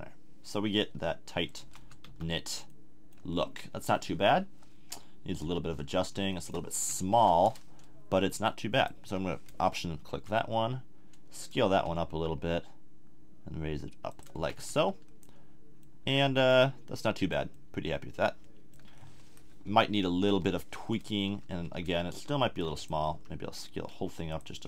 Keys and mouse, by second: 1.6 a, 1.8 Tab, 2.0 z, 2.5 middle click, 3.6 click, 4.7 KP_3, 5.4 KP_1, 7.1 Tab, 10.1 s, 11.4 click, 11.8 g, 12.1-13.3 drag, 13.3 middle click, 14.2 click, 14.3 a, 14.6 Tab, 15.0 click, 19.6 KP_3, 20.2 KP_1, 21.3 Tab, 22.5 b, 23.1 s, 24.4 click, 24.5 g.